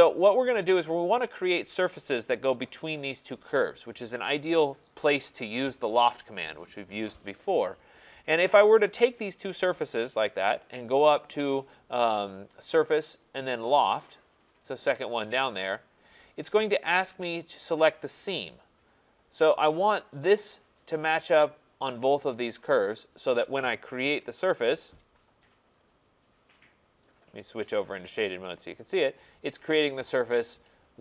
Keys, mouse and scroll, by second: 0.1 click, 2.8-7.8 drag, 8.1-12.0 drag, 13.4 click, 15.5 click, 24.0 Return, 25.9 click, 27.3 click, 28.0 click.